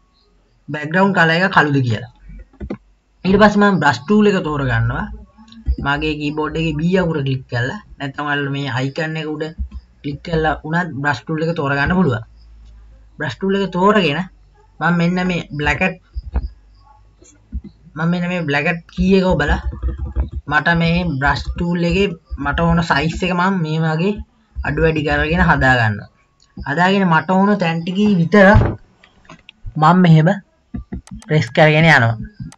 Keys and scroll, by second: 5.8 b, 17.7 KP_1, 19.1-25.7 typing.